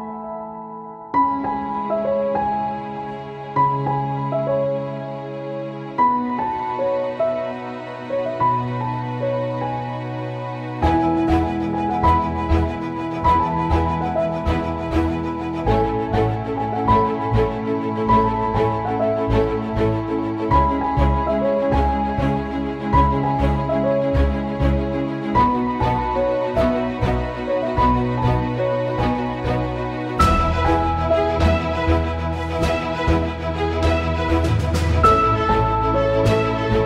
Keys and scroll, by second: 0.5 ctrl+2, 14.4 space, 18.7 ctrl+z, 19.9 ctrl+z, 21.1 space, 23.0 ctrl+z, 24.1 ctrl+z, 27.5 space, 28.5 space, 29.5 ctrl+z, 29.6 ctrl+z, 31.2 ctrl+z, 31.7 space, 34.6 ctrl+z, 34.8 ctrl+z, 34.9 ctrl+a.